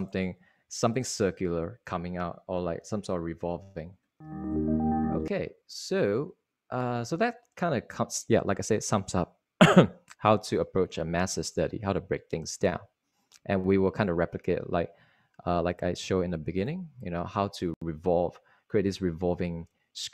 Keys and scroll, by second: 3.2 ↻, 3.9 ↻.